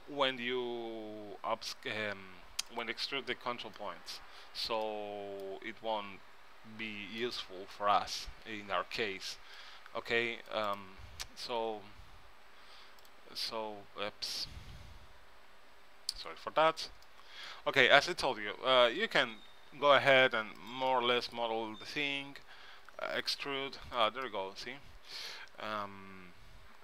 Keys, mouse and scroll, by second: 3.9-6.6 middle drag, 6.8-7.3 scroll up 1, 7.3-8.5 middle drag, 8.5 a, 9.3 c, 11.8 g, 13.2 x, 14.6 g, 18.1-20.0 drag, 19.4 g, 21.0 middle click, 21.9 a, 22.0 a, 23.0 e, 26.3 s.